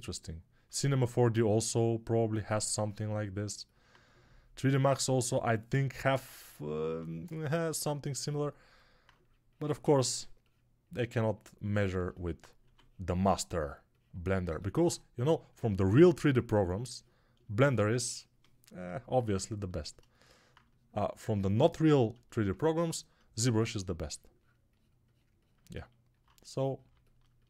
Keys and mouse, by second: 12.5 2, 23.2 1.